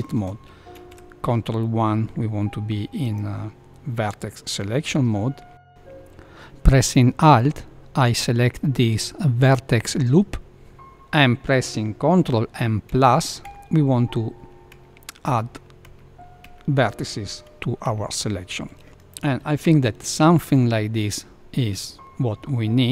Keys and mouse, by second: 0.7 ctrl+1, 3.0 click, 7.1 ctrl+click, 13.4 ctrl+KP_Add, 14.7 ctrl+KP_Add, 15.2 ctrl+KP_Add, 15.8 ctrl+KP_Add, 16.4 ctrl+KP_Add, 17.8 ctrl+KP_Add, 19.6 ctrl+KP_Add, 20.5-22.9 middle drag.